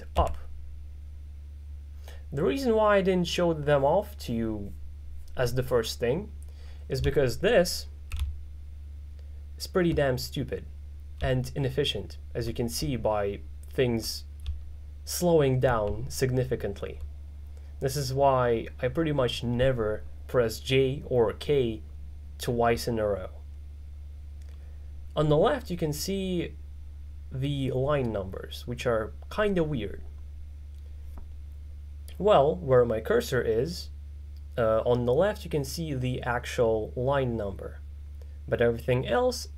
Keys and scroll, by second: 0.2 k, 6.9-17.3 typing.